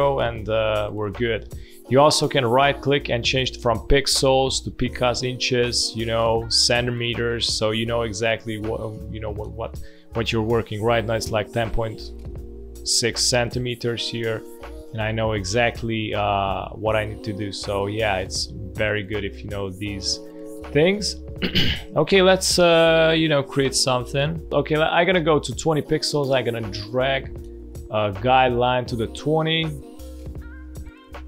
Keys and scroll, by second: 0.5 space, 1.2 alt+space, 8.4 space, 18.7 space, 19.7 space, 20.5 space, 21.6 space, 23.3 space, 30.0 space.